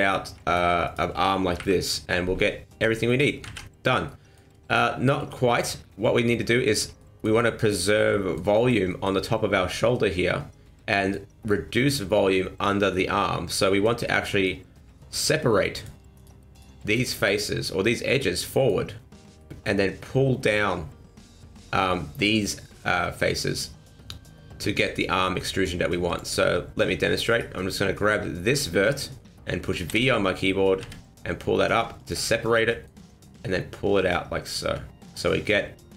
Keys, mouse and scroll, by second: 0.5 shift+right click, 0.8 shift+right click, 1.6 KP_1, 2.7 e, 3.4 ctrl+z, 4.0 middle click, 5.2 middle click, 6.0 scroll up 1, 6.5 shift+middle click, 7.0 middle click, 8.1 middle click, 8.5 middle click, 8.9 middle click, 10.5 middle click, 12.9 middle click, 14.0 middle click, 15.1-15.7 scroll up 1, 15.7 right click, 16.2 right click, 16.5 right click, 16.9 right click, 17.2 right click, 18.4 middle click, 19.4 middle click, 22.9 middle click, 26.1 click, 27.3 right click, 29.9 v, 32.3 middle click, 33.3 click, 35.3 m, 35.8 click.